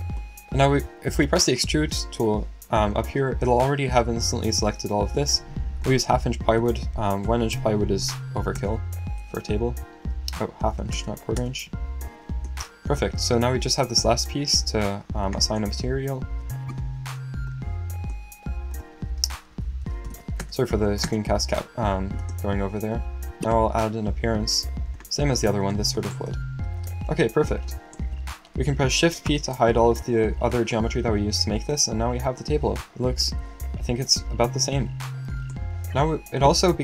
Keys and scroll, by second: 4.5 typing, 6.3-9.0 typing, 10.1-11.3 typing, 12.9-14.1 typing, 16.6 typing, 19.3-20.6 typing, 29.3 alt+shift+p.